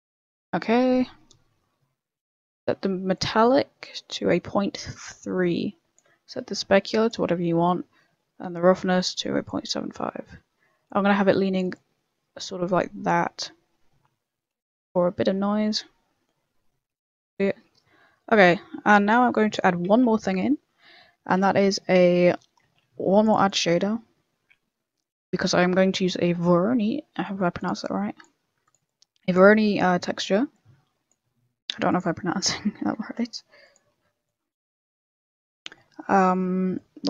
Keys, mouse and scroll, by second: 0.5 click, 2.0 middle click, 2.1 middle click, 3.1 click, 6.3 click, 7.6 click, 10.1 middle click, 10.8 click, 11.7 click, 13.4 middle click, 16.8 middle click, 18.6 middle click, 19.3 click, 19.8 shift+a, 20.8 middle click, 21.6 scroll down 1, 21.8 middle click, 22.2 middle click, 22.6 shift+a, 26.8 middle click, 26.8-27.2 scroll down 14, 27.2 middle click, 27.6 click, 27.8 click, 28.9 click, 29.8 click, 31.7 click, 31.9-32.3 ctrl+click, 33.0 ctrl+z, 33.6 shift+click, 34.2 click, 34.7-35.8 scroll up 18, 35.4 middle click, 35.9 middle click, 36.7 click.